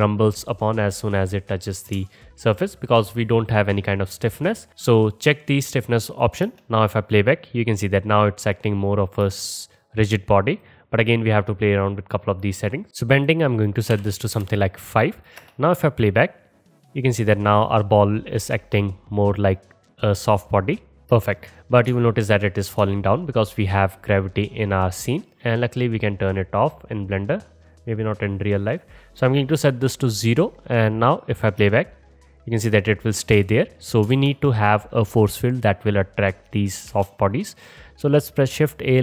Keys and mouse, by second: 4.7-5.5 middle drag, 5.5 click, 5.7-10.4 middle drag, 6.5 space, 9.2 space, 10.4-21.6 drag, 15.4 space, 21.1 space, 31.6 space, 33.5 space, 34.2 shift+a, 36.9 shift+a.